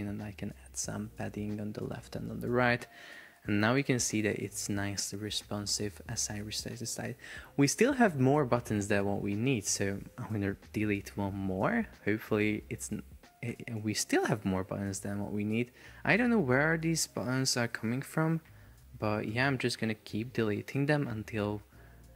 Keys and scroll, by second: 2.2 Return, 3.8 super+p, 8.4 Escape, 10.4 BackSpace, 11.6 super+p, 13.6 Escape, 18.5 BackSpace, 19.3 BackSpace, 20.8 super+p.